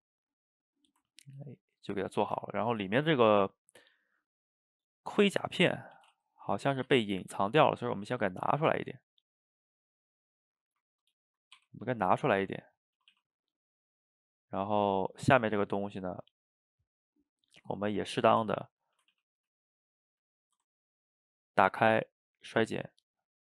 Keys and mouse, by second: 0.7-2.2 middle drag, 2.2 shift+right click, 2.6-4.0 ctrl+middle drag, 4.0 click, 4.6-6.0 middle drag, 6.0 g, 7.1-8.0 middle drag, 8.0 g, 9.0-11.6 middle drag, 11.6 r, 12.4 g, 13.0 a, 13.1 a, 13.3-15.0 middle drag, 15.0 click, 15.4-16.1 middle drag, 16.1 shift+click, 18.5 Tab, 19.0 a, 19.1 a, 19.5 shift+z, 19.8-20.8 middle drag, 20.8 ctrl+right click, 22.4 click, 23.2 ctrl+right click.